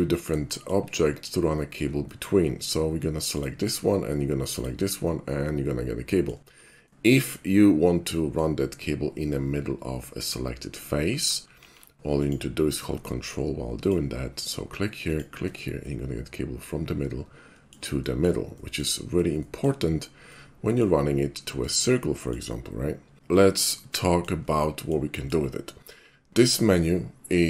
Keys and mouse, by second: 0.5 shift+middle click, 0.7 shift+click, 0.9 shift+middle click, 1.6 shift+middle click, 2.1 shift+middle click, 3.4 shift+click, 4.5 click, 5.3-6.3 middle drag, 6.9-7.3 middle drag, 8.2 middle click, 10.2 right click, 11.6 alt+shift+c, 12.2 click, 13.9 ctrl+click, 15.1 ctrl+click, 15.9-17.7 ctrl+middle drag, 18.1 shift+middle click, 18.5 shift+middle drag, 19.4 shift+middle click, 20.3 shift+middle click, 21.9 shift+middle click, 23.4 shift+middle drag, 23.9-24.3 shift+middle drag, 24.3 shift+click, 24.6 shift+middle click, 24.7 shift+click, 25.2 shift+middle click, 25.3 shift+click.